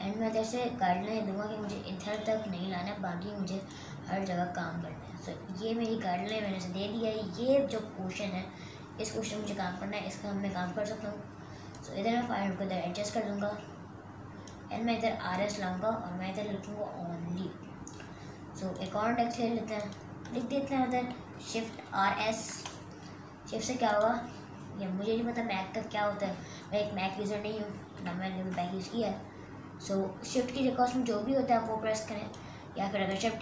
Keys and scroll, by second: 21.7 shift+r, 22.0 shift+s, 28.1 ctrl+t.